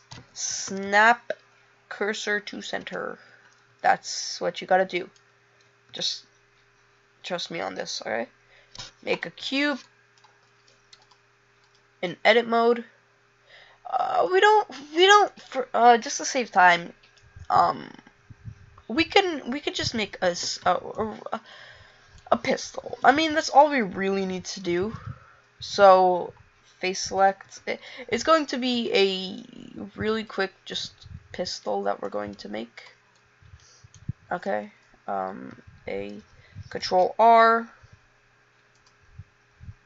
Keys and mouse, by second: 6.0 shift+a, 24.9 a, 27.7 b, 28.8 e, 32.4 click, 32.4 e, 35.6 a, 37.0 ctrl+r.